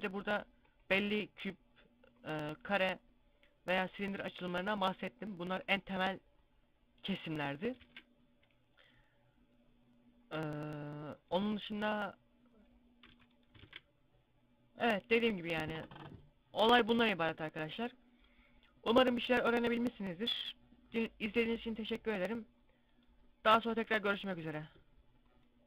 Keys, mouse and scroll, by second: 7.7 shift+a, 13.1 x, 13.5 shift+a.